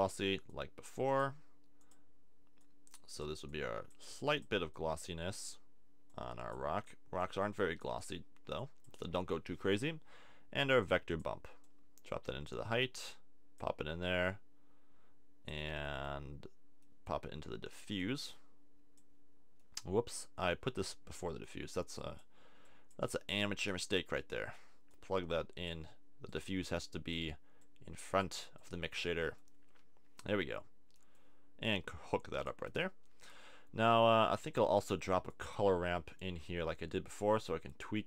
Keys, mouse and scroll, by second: 2.7 click, 9.1 shift+a, 18.0 click, 22.0 click, 28.7 click, 34.5 click, 36.1 shift+a.